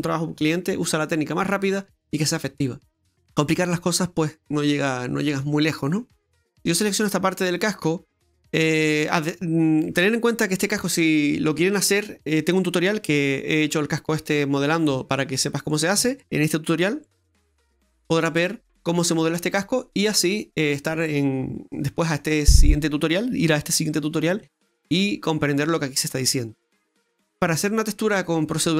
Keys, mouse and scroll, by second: 5.3 middle click, 6.3 scroll up 1, 7.8-8.1 scroll down 1, 8.4 middle click, 21.9 middle click, 25.3 middle click.